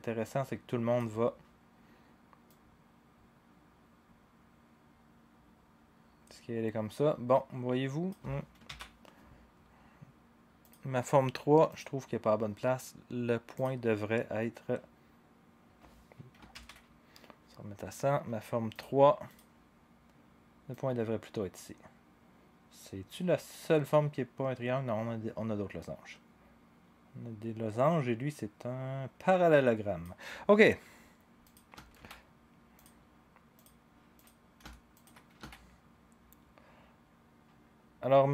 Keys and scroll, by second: 8.6 ctrl+z, 16.5 ctrl+z, 31.9 ctrl+a, 35.3 s.